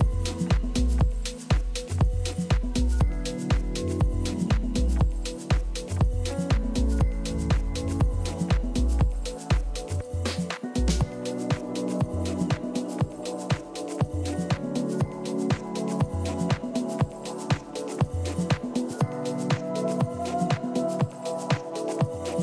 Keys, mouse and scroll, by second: 3.7 a, 6.0 b, 9.5-11.2 drag, 11.3 click, 13.4 a, 13.9-15.1 middle drag, 15.5 a, 15.8 a, 18.1 b, 21.0-22.4 drag.